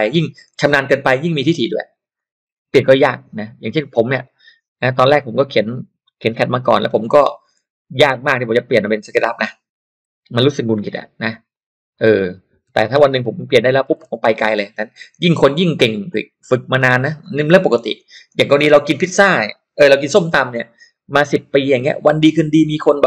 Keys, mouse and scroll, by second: 2.1 click, 3.7-5.3 drag, 6.7-10.2 typing, 11.0 middle click, 11.5 click, 11.9 click, 12.4-14.2 typing, 16.1-17.4 drag.